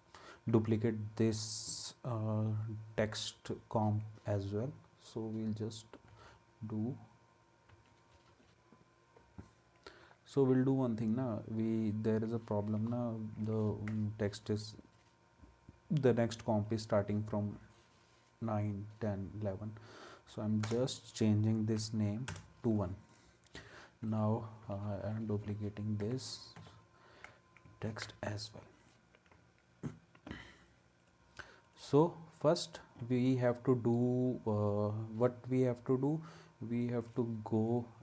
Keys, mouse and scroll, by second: 6.1 ctrl+d, 7.7 ctrl+d, 12.2 ctrl+z, 20.6 Return, 21.8 1, 22.3 Return, 24.0 ctrl+d, 27.9 ctrl+s.